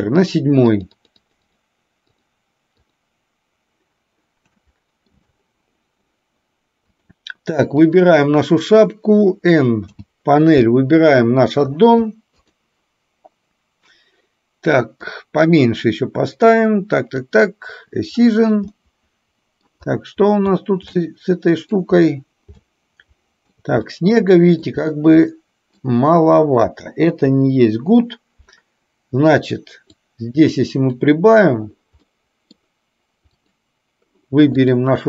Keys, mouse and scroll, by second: 0.9 click, 1.3 click, 1.6 click, 2.2 click, 2.8 click, 4.7-5.3 shift+middle drag, 6.9 click, 9.8 n, 15.1-16.6 drag, 17.2 click, 18.8-19.7 middle drag, 20.9-21.8 shift+middle drag, 22.7-23.7 shift+middle drag, 23.9-24.8 middle drag, 25.3-25.8 middle drag, 27.3 Delete, 29.9-31.1 drag, 32.1 middle click, 33.3 click.